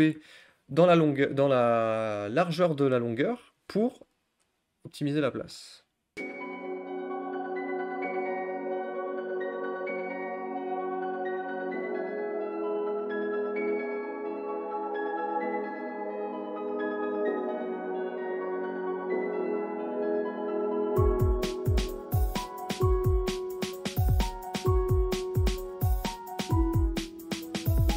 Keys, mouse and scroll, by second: 6.5-7.0 scroll up 13, 7.0 scroll down 6, 7.3 shift+middle click, 7.7 scroll down 1, 7.7 shift+middle click, 7.8-8.2 scroll up 3, 7.9 shift+middle click, 8.0 click, 8.2 alt+shift+click, 9.1 u, 9.1 a, 9.3 u, 9.6 shift+middle click, 10.1 scroll down 5, 10.2 middle click, 10.4 middle click, 10.9 scroll up 2, 11.0 click, 11.0 click, 11.1 alt+shift+click, 11.5-13.6 typing, 12.1 middle click, 12.4 scroll up 1, 12.5 click, 12.9 click, 13.7 ctrl+z, 14.0 middle click, 14.1 ctrl+z, 14.1 ctrl+z, 14.2 shift+middle click, 14.4 scroll down 4, 14.5 scroll up 1, 14.5 middle click, 15.5 click, 15.6 click, 15.7 alt+shift+click, 15.9 alt+shift+click, 17.0 u, 17.0 a, 17.2 u, 17.7 click, 17.8 middle click, 18.1 click, 18.3 middle click, 18.7 click, 19.6 middle click, 19.7 scroll down 1, 19.8 click, 20.4 middle click, 20.5 scroll up 1, 20.5 middle click, 21.1 middle click, 21.3 middle click, 21.4 click, 21.7 middle click, 22.0 click, 22.1 scroll up 1, 22.2 middle click, 22.7 click, 23.6 u, 23.8 a, 24.1 u, 25.0 click, 25.2 scroll down 3, 25.7 ctrl+z, 25.8 click, 26.6 click, 26.8 scroll down 1, 26.9-27.2 scroll up 1, 27.2 scroll down 1, 27.3 scroll up 1, 27.3 shift+middle click, 27.9 click.